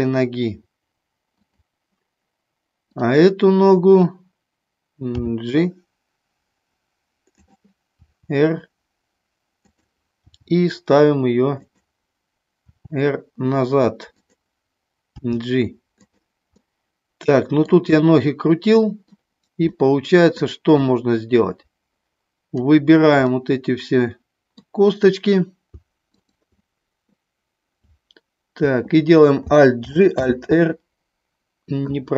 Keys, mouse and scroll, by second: 1.4 click, 5.2 g, 7.3 click, 8.1 r, 9.6 click, 10.3 g, 11.6 click, 12.6 r, 15.2 g, 15.9 click, 16.6 scroll up 1, 16.8 middle click, 17.9 scroll up 1, 18.0 middle click, 19.7 scroll up 1, 19.9 middle click, 20.7-22.7 drag, 23.3-24.6 middle drag, 26.1 shift+click, 29.8 alt+g, 30.1 r.